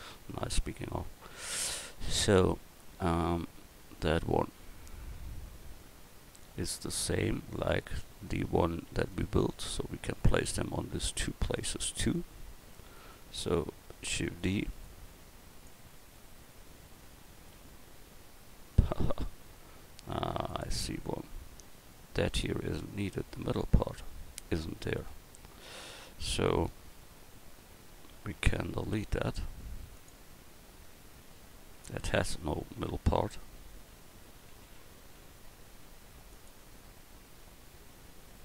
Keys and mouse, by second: 0.8 KP_1, 4.4-6.5 middle drag, 8.0 middle click, 13.0-14.1 right drag, 14.1 shift+d, 20.1 x, 24.0 Tab, 24.8 right click, 25.1 Tab, 25.7 a, 27.4 l, 29.1 x, 31.3 l, 31.9 l, 33.5 a, 33.9 l, 35.8 x.